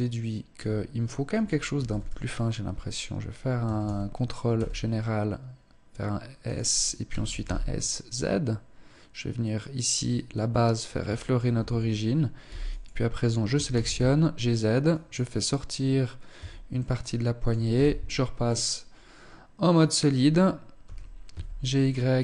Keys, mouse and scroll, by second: 1.2 s, 3.0 a, 3.2 a, 4.0 s, 6.0 click, 6.5 s, 10.6 shift+middle click, 10.6 a, 11.9 b, 12.9 g, 15.8 Tab, 16.2 middle click, 17.1 z, 17.8 middle click, 20.2 g.